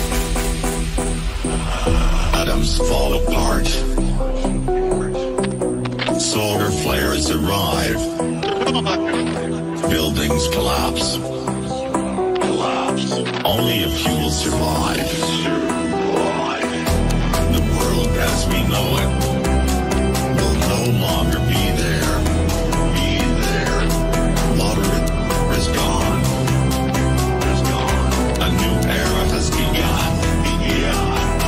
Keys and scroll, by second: 9.5 Caps_Lock, 10.9 p, 13.0-15.7 typing.